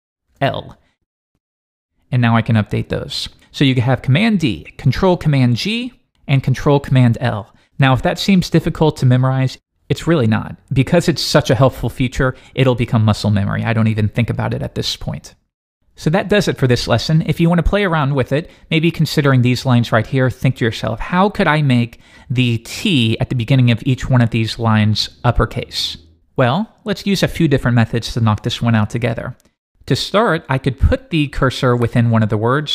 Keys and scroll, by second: 0.3 shift+super+l, 3.2 shift+d.